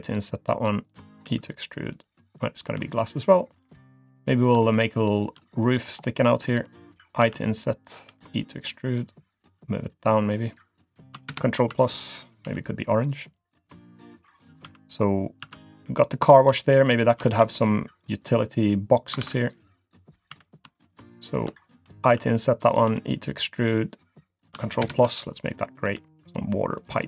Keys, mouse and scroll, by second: 1.2 e, 2.6 g, 3.5 scroll up 1, 3.6 middle click, 4.2 click, 4.6 shift+click, 4.9 shift+click, 5.1 shift+click, 5.5 middle click, 5.9-6.6 scroll down 1, 7.2 i, 8.1 e, 10.0 click, 11.3 ctrl+KP_Add, 12.5 g, 13.7 click, 14.1 middle click, 14.4-14.9 scroll down 3, 14.6 Tab, 14.9-15.4 scroll up 2, 15.4 Tab, 15.8-16.3 scroll up 1, 16.6 click, 17.3 ctrl+r, 19.2 ctrl+r, 20.3 3, 20.4 click, 20.8 shift+click, 21.1 shift+click, 22.0 i, 22.9 e, 24.8 ctrl+KP_Add, 25.9 g.